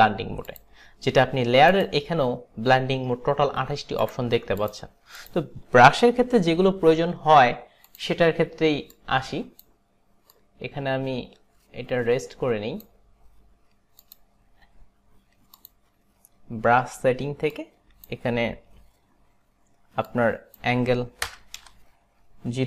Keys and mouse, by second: 0.5 click, 1.7 click, 4.0 click, 4.7 click, 5.2 click, 6.8 Delete, 9.0 click, 10.4 click, 14.1 click, 15.6 click, 17.7 click, 20.2 click, 21.3 KP_0, 21.7 Return.